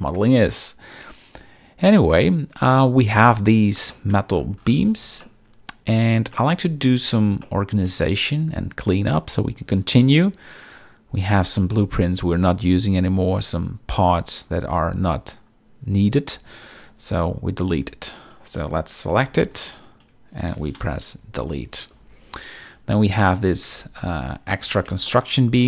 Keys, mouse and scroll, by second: 3.9-4.3 middle drag, 5.2 shift+middle click, 6.3 shift+middle click, 7.4-7.8 shift+middle drag, 18.2 click, 19.1 b, 19.5 click, 21.1 Delete, 22.6 click, 23.0 click, 24.1 KP_1, 25.1-25.6 shift+middle drag, 25.1-25.6 shift+scroll.